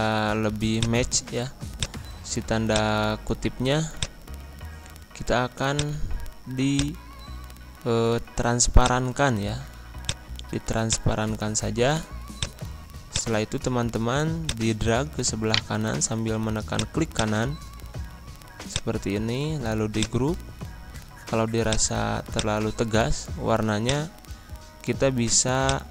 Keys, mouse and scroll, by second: 10.8-15.4 drag, 15.4 right click, 16.7 click, 19.9-25.9 drag.